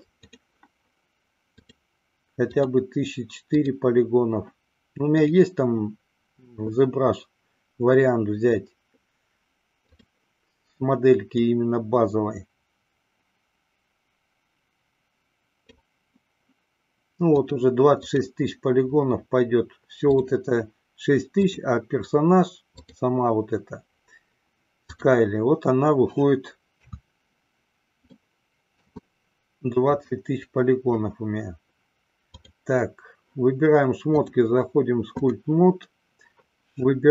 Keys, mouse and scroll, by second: 1.7 click, 2.5 click, 3.5 click, 5.4-10.1 drag, 11.4-15.9 drag, 17.3-18.3 drag, 21.5 click, 22.8 click, 26.7 KP_3, 28.1-29.0 middle drag, 32.3 click, 34.1-35.6 drag.